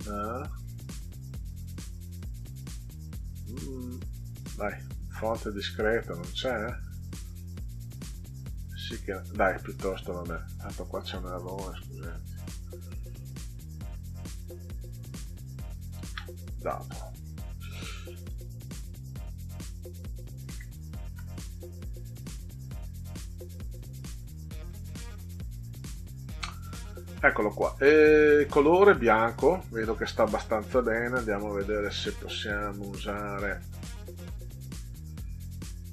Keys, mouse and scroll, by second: 0.4 scroll down 2, 1.3 click, 3.2 click, 3.5 scroll down 2, 4.3 click, 6.3 click, 6.7 scroll down 2, 7.9 click, 9.2 click, 10.7 click, 11.9 click, 12.8 Delete, 15.7-16.6 typing, 17.5 click, 18.3 click, 20.4 ctrl+a, 22.8 click, 23.4 click, 24.5 click, 34.1 click.